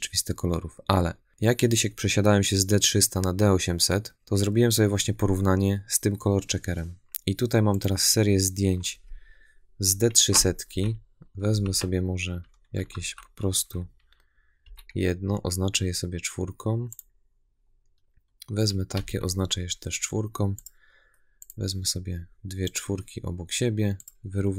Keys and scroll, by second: 10.6 Right, 12.8 Left, 14.5 4, 18.8 4.